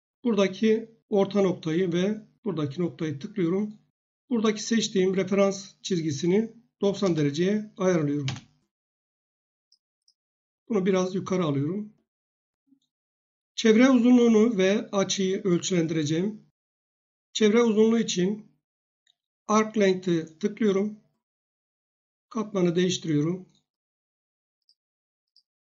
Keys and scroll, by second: 6.6-7.5 typing, 8.2 Return.